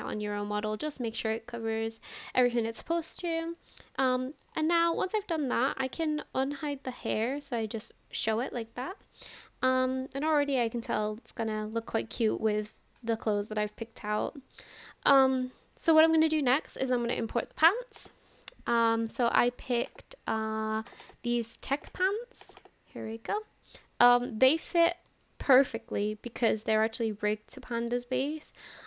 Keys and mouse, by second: 2.4-3.0 middle drag, 3.6-4.5 middle drag, 5.0 shift+middle click, 5.4 middle click, 7.8 click, 9.4 shift+middle click, 10.0-11.8 middle drag, 13.5 shift+middle click, 13.9-14.9 middle drag, 24.3-24.7 shift+middle drag, 25.2 shift+middle drag, 25.6-27.9 middle drag.